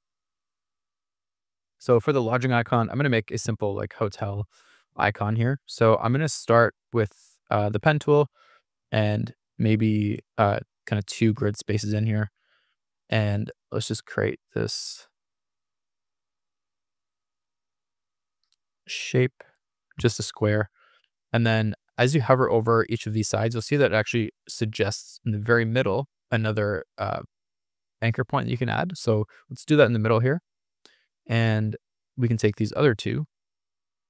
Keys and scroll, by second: 3.4 p.